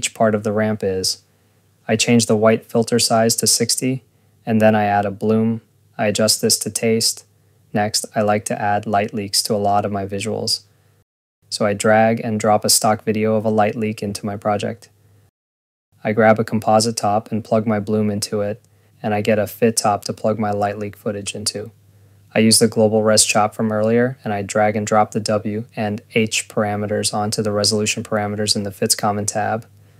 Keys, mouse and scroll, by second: 0.6 click, 3.0 ctrl+s, 3.0 scroll, 3.3 right click, 3.6-5.0 typing, 3.6 click, 4.3 click, 4.5 click, 4.8 click, 5.2 Return, 8.1 Return, 12.8 click, 15.0 click, 15.9 ctrl+s, 16.2 Tab, 17.3 click, 19.4 Tab, 21.2 Return, 21.9 click, 22.6 click, 23.2 scroll, 23.5 click, 24.1 click, 27.0 click.